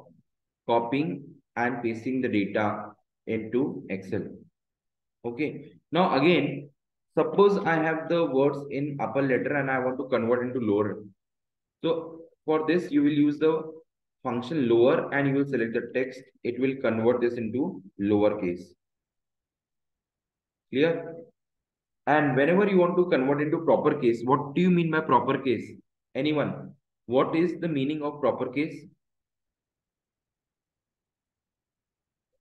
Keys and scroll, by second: 3.0 Escape, 5.0 Delete, 6.0 Left, 6.5 Right, 8.5 Right, 10.4 Left, 14.0 shift+9, 15.4 Left, 16.0 shift+0, 16.5 Return, 17.0 Up, 20.4 Right.